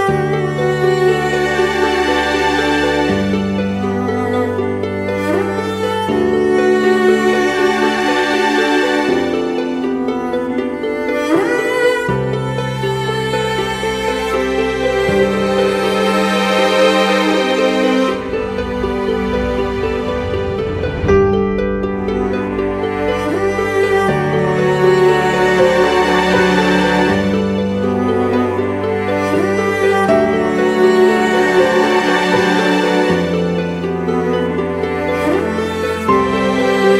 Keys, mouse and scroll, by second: 4.7 double click, 11.8 ctrl+t, 12.7 alt+shift+click, 17.2 alt+shift+click, 20.6 Return.